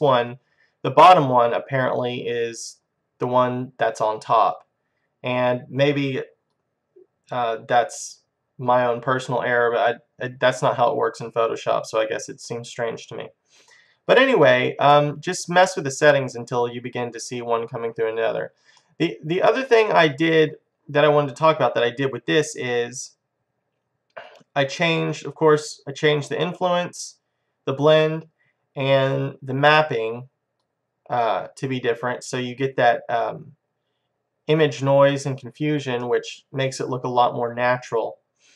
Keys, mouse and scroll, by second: 19.0-21.0 middle drag, 22.9-26.1 drag, 29.0-33.2 drag, 36.1-37.1 middle drag.